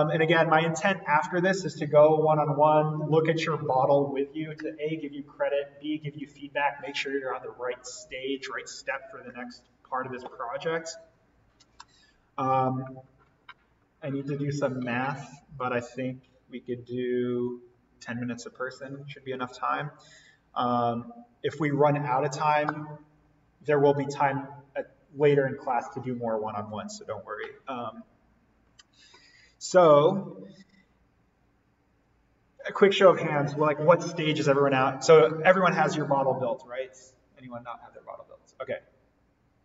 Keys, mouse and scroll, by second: 30.8-31.3 scroll up 1, 31.3-33.6 scroll down 1.